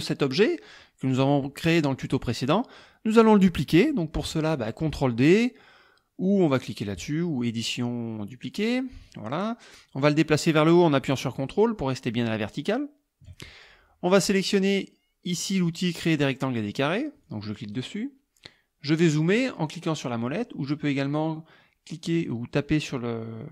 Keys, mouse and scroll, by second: 7.5 click, 8.6 click, 9.8-13.5 drag, 17.3 click.